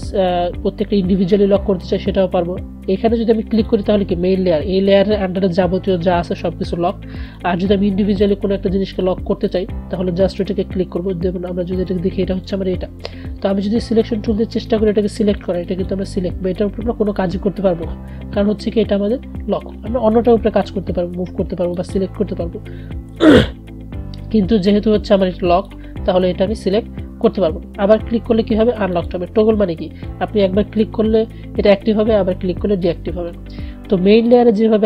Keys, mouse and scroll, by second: 3.7 click, 7.5 click, 14.8 click, 20.4-21.9 drag, 24.8-28.3 drag, 29.0 click, 34.4 click.